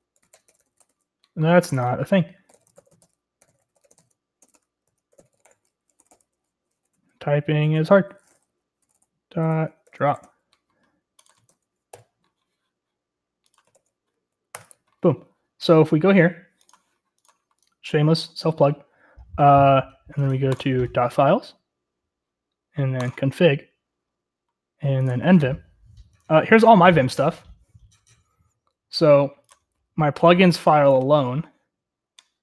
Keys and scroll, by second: 0.0-1.1 typing, 2.2-7.6 typing, 8.4 Down, 8.8-10.5 typing, 11.4 ctrl+c.